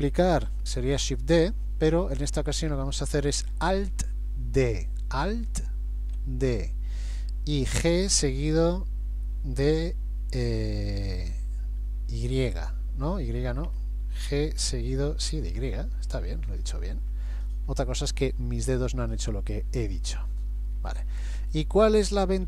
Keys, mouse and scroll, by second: 5.2 alt+d, 14.6 g, 19.9 middle click, 21.0-21.6 scroll down 2, 21.6-22.4 scroll up 1.